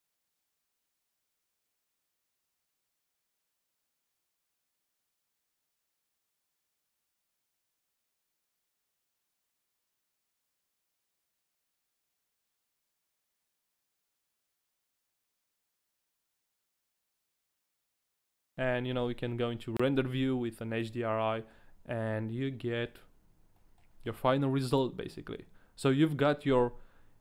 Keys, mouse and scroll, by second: 18.4 click, 18.5 middle click, 19.9-20.3 scroll up 1, 19.9 z, 20.8 click, 21.2 middle click, 22.2 middle click, 22.9-23.5 scroll down 1, 23.5 middle click.